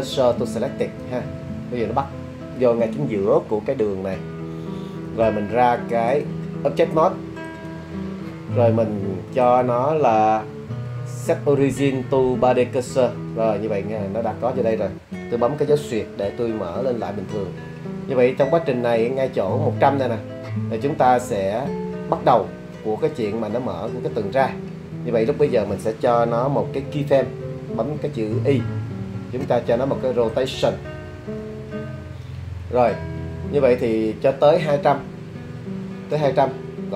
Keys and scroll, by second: 16.3 /, 28.7 i.